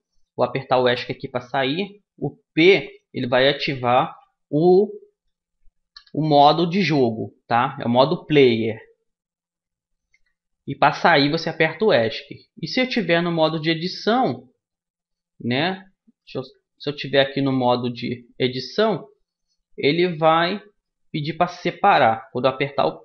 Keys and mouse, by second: 2.0-5.7 middle drag, 5.7 p, 12.8 Tab, 13.7-15.4 drag, 15.4 middle click, 15.7 a, 16.1 Tab, 17.4 Tab, 19.3-20.5 drag, 20.5 middle click, 20.9 middle click, 22.1 p.